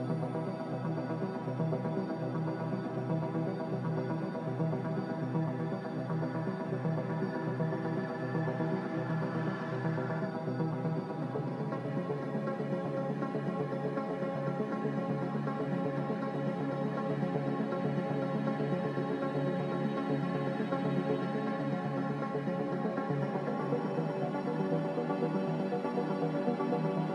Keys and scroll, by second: 2.3 typing, 15.4 a, 25.4 2.